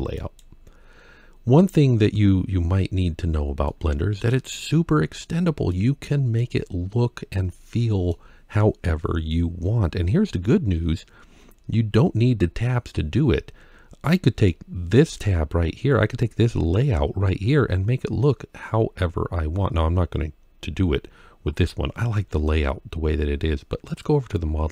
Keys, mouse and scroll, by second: 0.0 click, 1.3-2.0 scroll up 4, 3.1 scroll down 2, 3.5-4.1 middle drag, 4.6-5.5 scroll up 3, 5.5-6.2 middle drag, 7.1-7.9 middle drag, 9.8-10.7 scroll down 4, 10.7-11.3 scroll up 2, 11.3-12.9 scroll up 1, 13.9-14.3 middle drag.